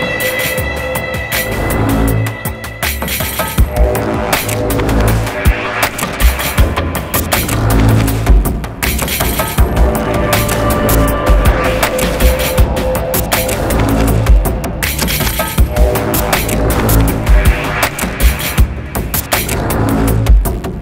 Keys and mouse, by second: 1.5-5.0 drag, 5.9-9.6 drag, 9.8-10.8 drag, 11.3-14.1 drag, 14.6-15.6 drag, 18.0-19.0 drag, 19.8-20.8 drag.